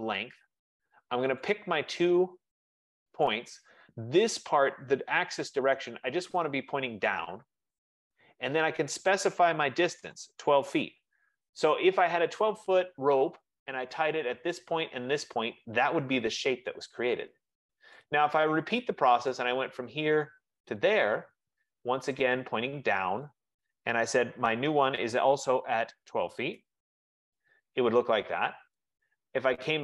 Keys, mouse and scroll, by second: 1.5 click, 3.3 click, 8.0 click, 10.3-10.9 typing, 10.7 Return, 18.1 right click, 19.4 click, 20.9 click, 23.5 click, 24.1 click, 26.6 Return, 28.8 F15, 29.0 right click.